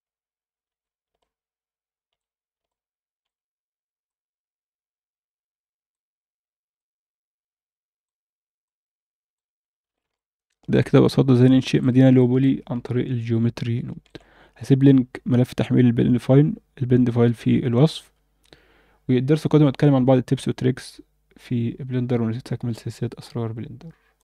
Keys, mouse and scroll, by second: 0.3 scroll up 2, 0.8 alt+a, 1.2-2.1 alt+middle drag, 2.3 scroll down 1, 2.6-3.3 alt+middle drag, 4.1-5.9 drag, 6.8-8.0 drag, 8.6 click, 9.6 scroll down 2, 9.9 alt+a, 10.1-11.8 alt+middle drag, 12.1 alt+shift+middle click, 12.8-14.1 ctrl+alt+middle drag.